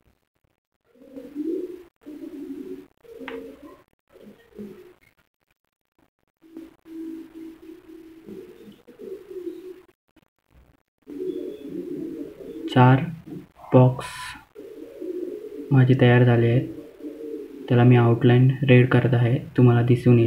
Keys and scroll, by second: 10.4 ctrl+z.